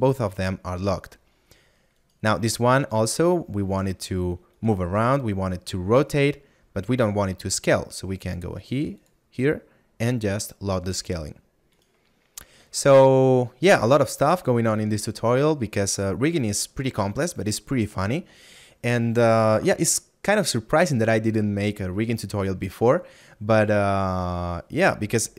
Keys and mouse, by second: 8.3 click, 12.4 middle click.